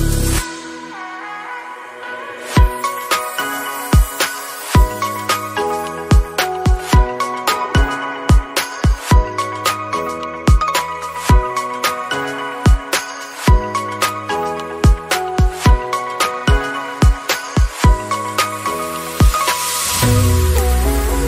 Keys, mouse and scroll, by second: 0.0 ctrl+z, 0.2-1.8 middle drag, 1.8 scroll up 4, 2.1-3.2 middle drag, 3.2 /, 3.4 middle click, 3.6 scroll up 2, 3.8 middle click, 4.7 scroll up 2, 4.8-5.8 middle drag, 5.8 click, 6.0 scroll down 2, 6.2 middle click, 6.8 shift+click, 7.4 scroll up 3, 8.0 middle click, 8.2 shift+click, 8.4 middle click, 9.2 ctrl+x, 9.4 middle click, 9.7 scroll down 1, 9.9 middle click, 10.2-10.7 scroll down 1, 10.7 ctrl+r, 11.8 scroll down 1, 11.9 middle click, 12.3 scroll up 3, 12.6 shift+middle click, 13.0 3, 13.5 alt+click, 13.7 middle click, 14.6 Tab, 15.0 ctrl+a, 15.3 Tab, 15.8 q, 17.6 Tab, 18.0 click, 18.4 Tab, 18.6-19.0 scroll down 2, 18.7 Tab, 20.5-21.2 middle drag.